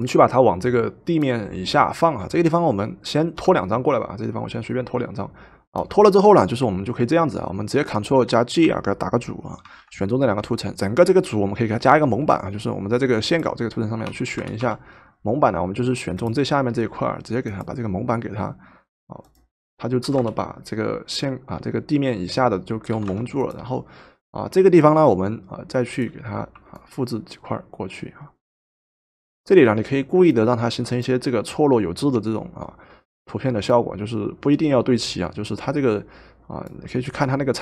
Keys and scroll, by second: 9.8 ctrl+g, 10.8 Return, 10.8 typing, 12.1 typing, 14.1 w, 14.7 w, 20.1 v, 23.0 v.